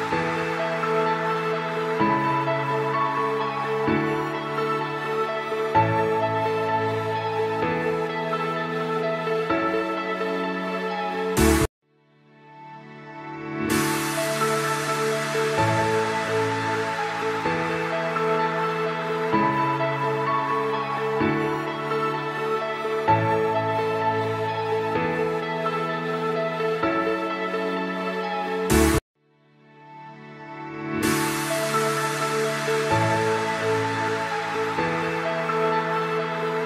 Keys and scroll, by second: 3.9 F3, 4.9 F4, 8.9 shift+Page_Up, 9.8 shift+F2, 10.3 Escape, 12.1 Escape, 17.4 F3, 20.6 shift+F2, 20.9 F3, 26.9 F4, 27.5 Escape, 31.0 Escape.